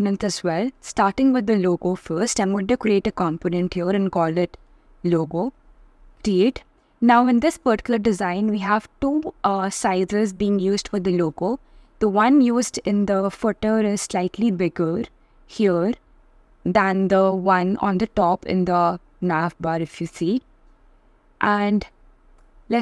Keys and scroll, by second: 3.3 shift+l.